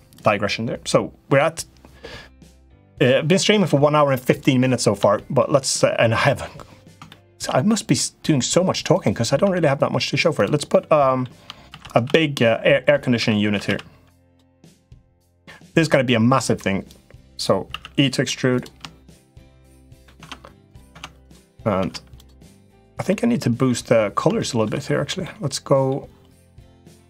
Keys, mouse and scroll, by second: 4.9 middle click, 5.6 middle click, 6.8 shift+middle click, 7.5 middle click, 9.2 Tab, 10.5 middle click, 11.4 shift+d, 11.8 s, 12.9 s, 14.8-15.8 drag, 16.6 click, 17.4 e, 19.6 middle click, 19.9 Tab, 20.5 click, 20.7 Tab, 21.0 click, 21.5 Tab, 22.8 middle click, 24.1 shift+middle click, 25.0 middle click, 26.8 click.